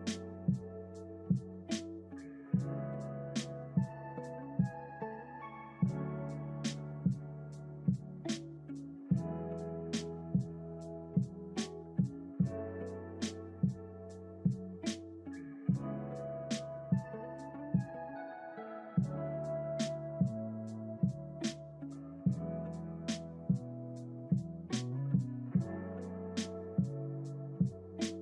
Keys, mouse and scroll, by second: 2.5-4.0 drag, 5.4 i, 9.9 click, 12.0 click, 12.8 click, 15.5 click, 16.2-18.0 scroll down 1, 18.0-18.8 scroll down 5, 18.8 click, 20.8-28.1 drag.